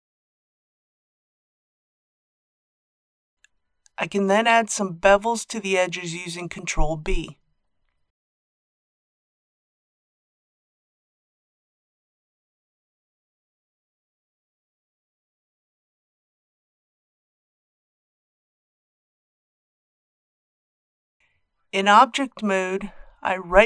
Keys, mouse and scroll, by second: 1.4 alt+shift+click, 6.1 ctrl+b, 15.0 click, 16.5-20.1 middle drag, 21.4 Tab, 23.0 right click.